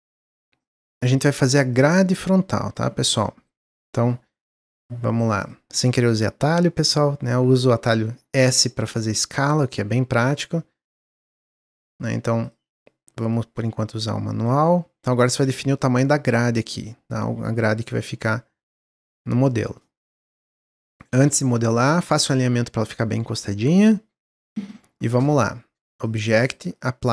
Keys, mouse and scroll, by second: 0.0 s, 1.6-2.8 drag, 2.8 scroll up 1, 3.1 middle click, 3.4 scroll up 1, 3.7-5.3 middle drag, 5.3-6.7 drag, 8.1-9.4 middle drag, 9.4 click, 12.4 click, 14.6-16.2 middle drag, 16.2-17.5 drag, 17.5-18.7 middle drag, 18.7 click, 19.4-21.0 middle drag, 21.0-21.4 scroll up 3, 21.4-22.7 middle drag, 22.7-23.6 drag, 26.0-27.1 drag.